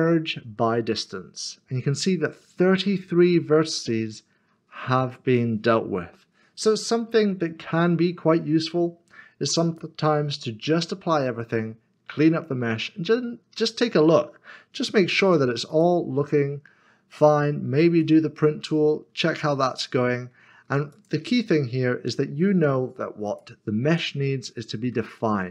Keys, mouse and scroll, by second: 0.7 m, 2.7 click, 12.7 click, 12.9 middle click, 15.7 click, 16.3 middle click, 20.5 q, 20.9 click, 21.5-23.2 scroll down 1, 23.2 click, 25.0 shift+middle click.